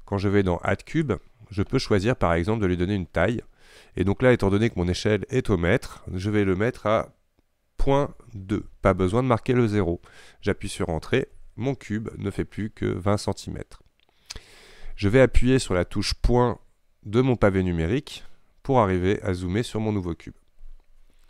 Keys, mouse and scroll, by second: 1.0 click, 3.3-6.3 drag, 18.8 KP_Decimal.